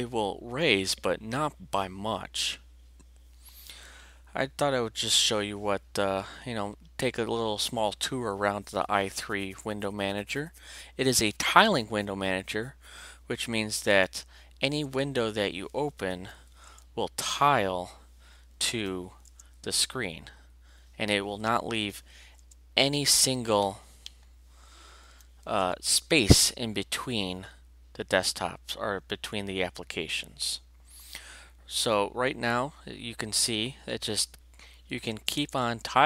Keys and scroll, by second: 13.9 alt+Return, 14.8 alt+Return, 16.1 alt+v, 16.7 alt+Return, 18.7 alt+v, 19.3 alt+Return, 21.7 alt+v, 22.4 alt+Return, 25.0 alt+v, 25.6 alt+Return, 35.1 alt+Return.